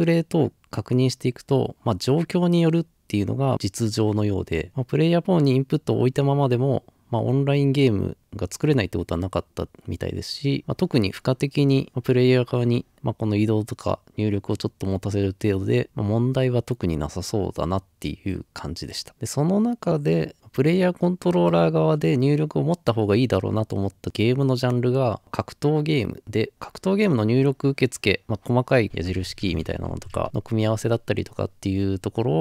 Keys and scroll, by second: 29.0 Left, 29.0 Right, 29.0 typing, 29.1 Down.